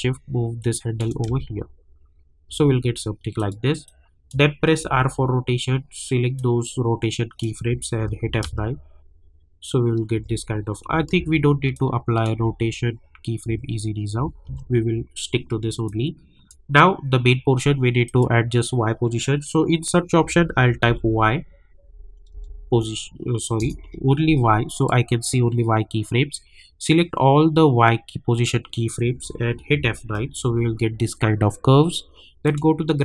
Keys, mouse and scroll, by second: 1.2 space, 3.3 click, 4.8 r, 5.4 scroll down 1, 6.3-8.0 drag, 8.0 F9, 8.4 space, 11.1 ctrl+z, 11.7 click, 12.3 space, 15.8-18.1 drag, 20.8 y, 22.1-22.8 typing, 24.7 click, 25.1 scroll down 1, 26.9-29.6 drag, 29.6 F9, 32.4 click.